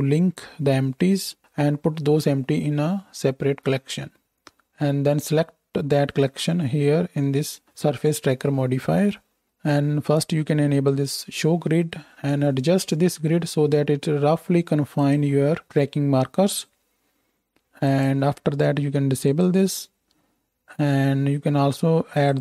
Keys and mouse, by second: 11.0-15.0 drag, 15.0 middle click, 15.1-17.8 drag, 18.0-19.3 drag, 19.4-22.1 drag.